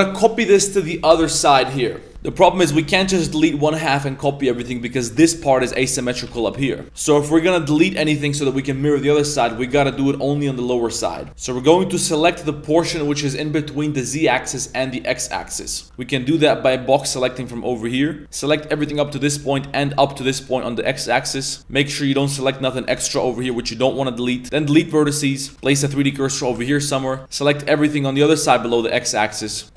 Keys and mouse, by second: 2.0 middle click, 2.3 middle click, 2.5 a, 2.9 z, 3.4 b, 5.2 z, 5.4 middle click, 5.7 Tab, 6.2 a, 6.4 middle click, 6.8 Tab, 6.8 KP_1, 6.8 KP_3, 7.4-8.2 middle drag, 8.4 middle drag, 9.1 middle click, 9.6 shift+middle click, 9.8 z, 9.8 middle click, 12.6 a, 15.5 shift+middle drag, 15.8 a, 15.9 b, 23.0 shift+middle click, 23.4 shift+middle click, 24.4 x, 25.5 a, 25.7 shift+s, 26.2 shift+middle drag, 27.1 b, 29.6 g.